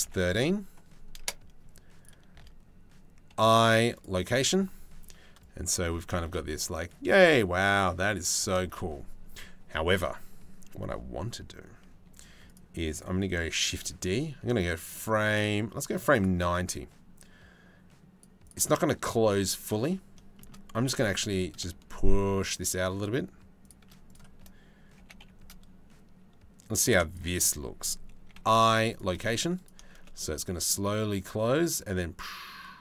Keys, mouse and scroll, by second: 3.0 i, 5.0 click, 5.8 shift+space, 8.2 shift+space, 12.1 click, 13.2 shift+d, 16.1-17.9 drag, 18.1 click, 20.0 shift+click, 20.4 g, 23.7 click, 24.6 g, 26.7 right click, 28.0 i, 29.2 click, 29.5 shift+space, 32.6 shift+space.